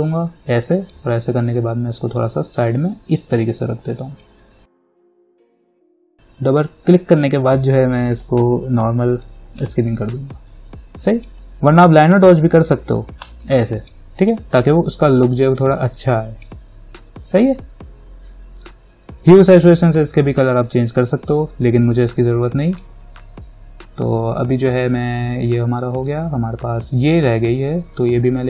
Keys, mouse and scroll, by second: 8.3-22.6 drag, 27.9-28.4 drag.